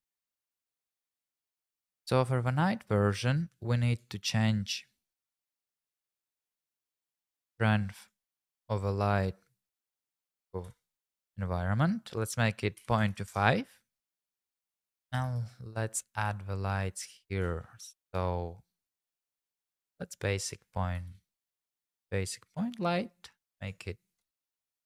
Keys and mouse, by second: 3.9 click, 6.3 middle click, 7.0 click, 8.2-11.0 drag, 12.2-13.3 drag, 15.3 shift+a, 16.3 shift+s, 17.9 shift+a, 20.9 g, 21.1 z, 22.5 click, 23.6 click.